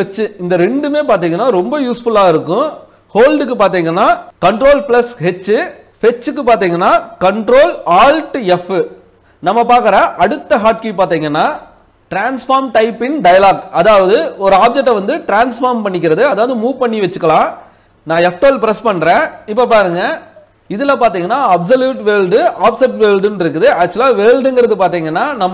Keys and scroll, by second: 3.3 ctrl+h, 18.1 F12.